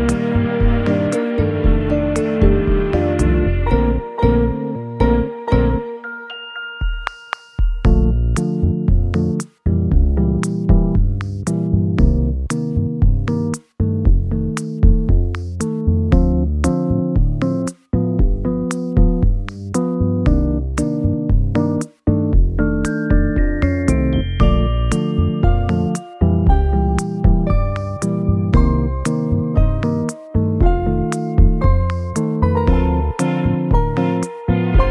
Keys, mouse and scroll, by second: 2.0 1, 2.2 Return, 15.8 middle click, 18.3 scroll up 1, 19.9 alt+z, 21.1 middle click, 22.6 2, 31.1 middle click, 32.8 g, 33.8 m, 34.0 g.